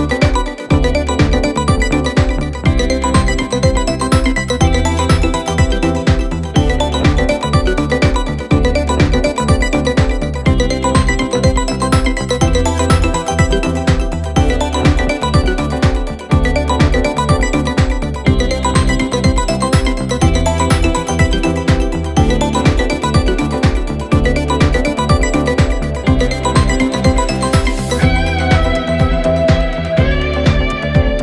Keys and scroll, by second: 2.5 3, 9.9 ctrl+z, 20.4 4, 23.4 2, 28.3 4, 31.0 3.